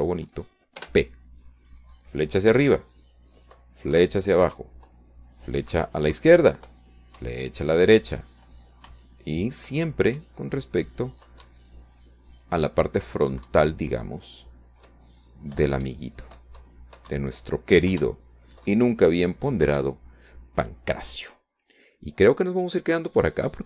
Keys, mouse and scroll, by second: 0.7 scroll down 1, 1.1 click, 2.1 scroll up 1, 2.9 click, 3.9 p, 5.7 Up, 7.0 Down, 9.2 Left, 12.0 Up, 13.3 Down, 14.5 Up, 16.6 Down, 18.0 Left, 18.9 Right, 19.7 Left, 20.2 Down, 21.1 Up, 22.7 Escape.